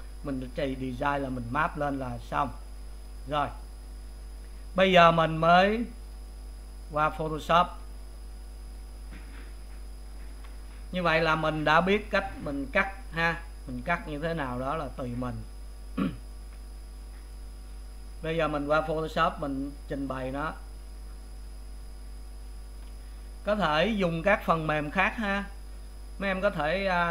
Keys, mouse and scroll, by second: 3.0 click.